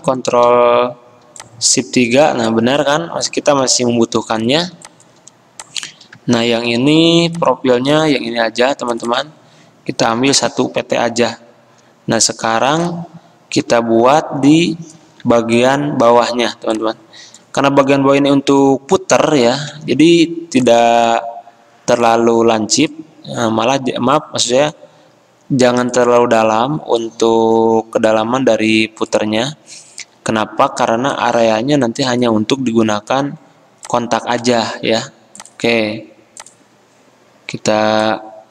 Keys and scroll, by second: 0.1 alt+3, 10.2 1, 10.5 Return, 15.2 ctrl+z, 19.7 a, 34.9 ctrl+z.